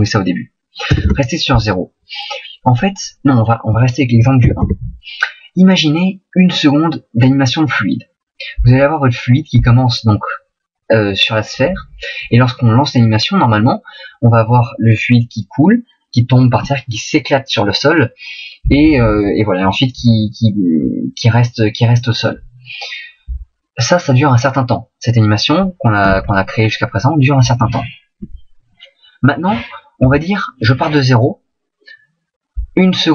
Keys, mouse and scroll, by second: 26.1 alt+a, 30.0 Escape.